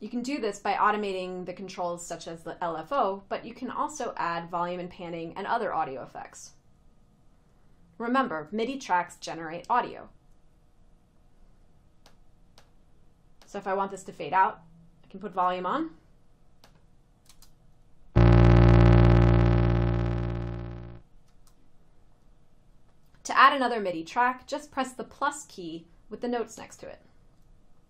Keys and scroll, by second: 17.5 space, 21.5 space.